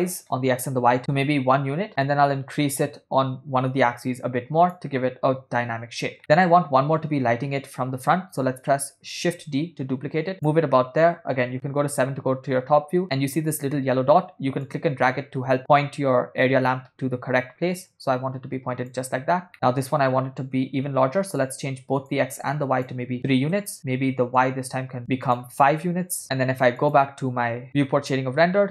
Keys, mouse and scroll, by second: 1.9-5.1 drag, 6.2 middle click, 9.2 shift+d, 11.7 KP_7, 14.6-19.0 drag, 19.5 middle click, 21.4 shift+click, 22.5 shift+click, 24.8 click, 25.3-27.5 drag, 27.9-28.7 ctrl+middle drag.